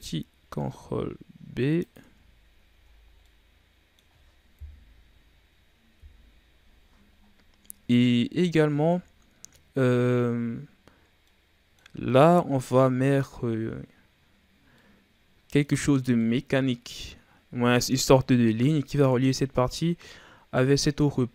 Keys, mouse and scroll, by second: 2.3-3.2 scroll down 7, 2.7 a, 3.2-4.5 middle drag, 4.5 KP_1, 5.9 KP_3, 7.1-8.2 scroll up 6, 8.2-9.1 ctrl+scroll up 2, 9.1 shift+scroll down 4, 10.6-11.0 scroll up 1, 11.0 scroll down 2, 11.2-12.0 middle drag, 12.1-14.7 scroll down 2, 14.8-18.3 middle drag, 18.3-20.1 scroll up 1.